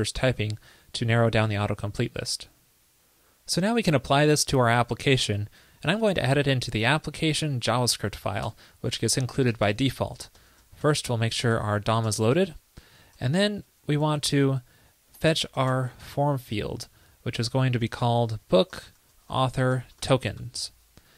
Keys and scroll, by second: 13.7 super+x.